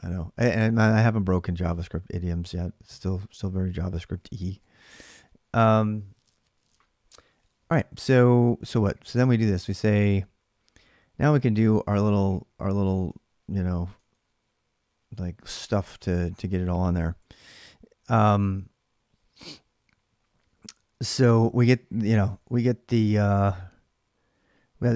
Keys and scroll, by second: 4.3 ctrl+[, 4.4 j, 7.9-8.7 typing, 10.9-15.6 typing, 11.7 ctrl+[, 17.0 j, 17.1 j, 20.7 k, 20.9 k, 22.2 o.